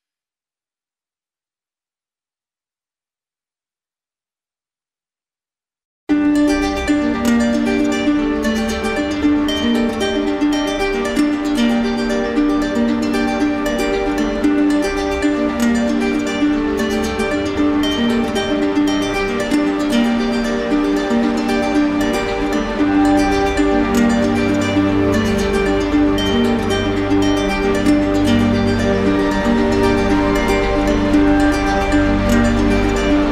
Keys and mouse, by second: 4.0 right click, 5.0 right click, 6.8 right click, 8.3 right click, 8.5 shift+right click, 10.1 right click, 16.7 click, 18.9 right click, 28.4 click, 31.1 click, 31.5 ctrl+z.